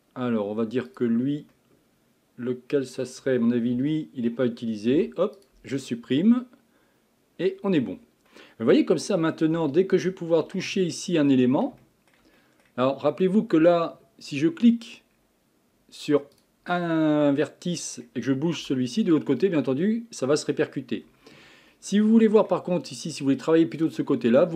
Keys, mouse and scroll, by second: 0.9 click, 1.5-3.7 middle drag, 3.7 l, 4.9 Delete, 6.3-7.8 middle drag, 7.8 scroll down 2, 8.3-10.5 middle drag, 10.5 Tab, 10.9-11.4 middle drag, 11.4 Tab, 11.8-15.1 shift+middle drag, 15.1-16.4 scroll up 3, 16.4 click, 16.7-17.1 scroll down 1, 17.1-18.6 middle drag, 18.6 g, 21.7-24.5 middle drag.